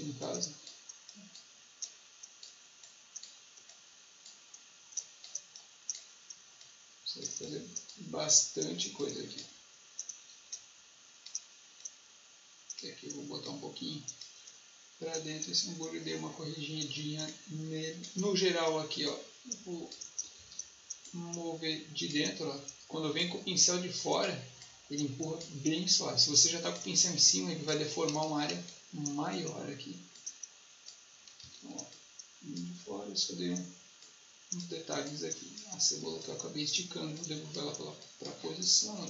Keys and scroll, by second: 20.3 ctrl+z, 28.0 ctrl+z, 31.3 ctrl+z, 36.0 space.